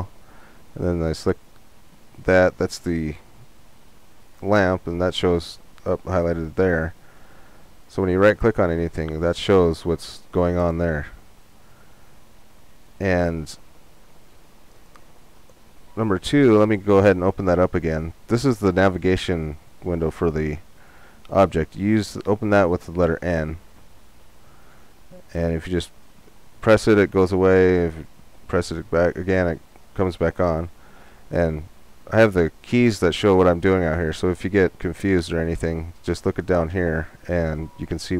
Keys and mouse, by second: 1.0-10.0 right drag, 20.3 n, 23.7 n, 24.7 n, 25.3 n, 25.7 n, 26.9 n, 27.6 n.